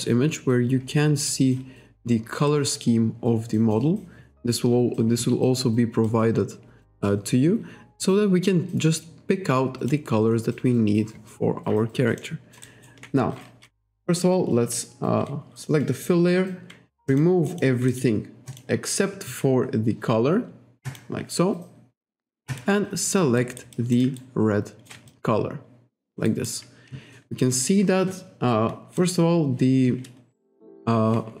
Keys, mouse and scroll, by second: 1.3 click, 2.5 click, 6.1 click, 10.7-11.1 scroll down 1, 11.6 scroll up 1, 12.2 alt+middle click, 12.7 alt+right click, 17.1 click, 17.5 click, 17.9 click, 18.5 click, 20.9 click, 23.4 alt+right click, 23.8 alt+click, 24.2 shift+right click, 25.1 alt+click, 26.3 alt+right click, 29.0 click, 30.6 click.